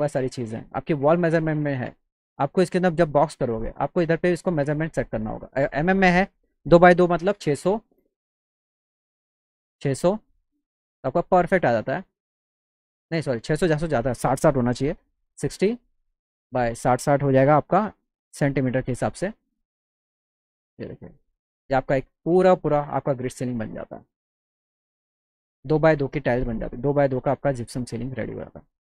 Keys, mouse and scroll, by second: 2.0 click, 4.7-5.8 drag, 7.4 KP_6, 8.9 Tab, 9.3 KP_6, 13.7 click, 16.2 click, 18.9 BackSpace, 19.7 click, 25.2 click, 25.6 z, 28.3 alt+middle drag.